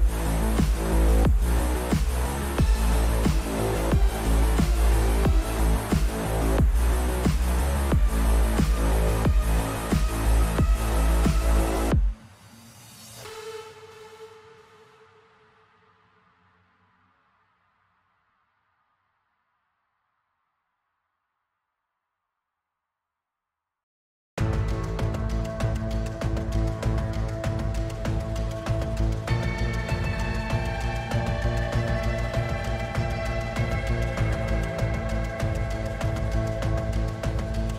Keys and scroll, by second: 8.0 w, 11.6 Escape, 12.5 Escape, 14.4-15.4 typing, 17.4-18.3 typing, 20.1-21.5 typing, 31.0 F11, 31.7 w, 32.7 w, 33.5 w, 34.7 a, 35.8 d, 36.7 w.